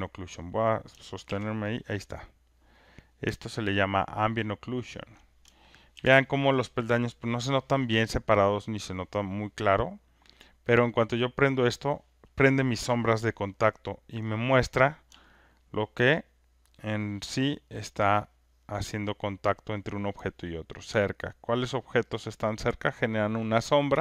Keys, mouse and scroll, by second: 1.2 ctrl+F1, 2.2 click, 5.1 ctrl+click, 5.9 ctrl+F1, 8.5 click, 8.8 click, 11.1 click, 13.7 ctrl+right click, 15.5 alt+right click, 19.6 alt+click, 23.8 alt+right click.